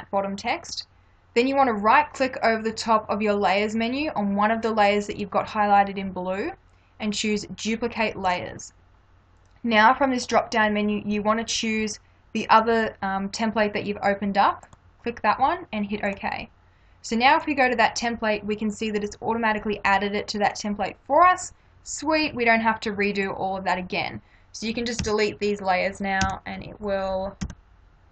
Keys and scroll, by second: 25.0 Delete, 27.5 Delete.